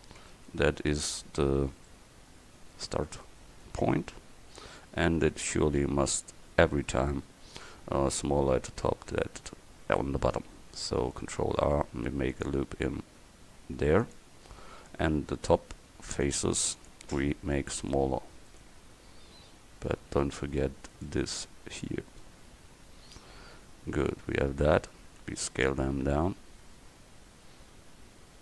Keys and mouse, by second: 0.3 Tab, 2.9 Tab, 11.3 ctrl+r, 16.3-17.8 drag, 17.8-19.7 right drag, 19.7-23.9 drag, 22.2-23.3 middle drag, 25.3 s.